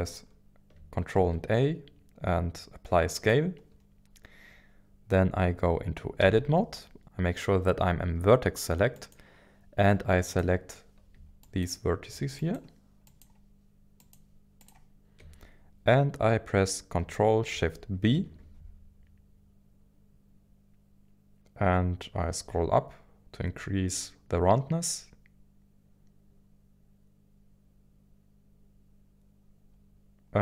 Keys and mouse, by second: 1.1 ctrl+a, 6.2 Tab, 9.0-10.4 drag, 11.4 shift+click, 12.5 shift+click, 14.1 shift+click, 14.6 shift+click, 18.1 ctrl+shift+b.